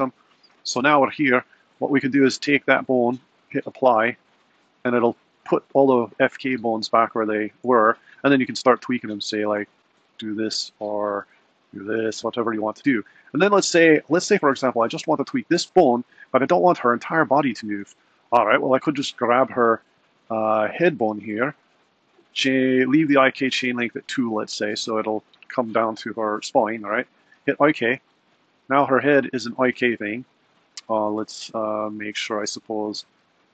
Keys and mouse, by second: 1.7 click, 4.4-5.3 drag, 7.0-7.6 middle drag, 9.1 click, 9.6 r, 11.6 click, 12.1 r, 14.2 click, 16.3 r, 20.7 click, 27.3-28.5 drag, 31.4 super+z, 32.1 super+z.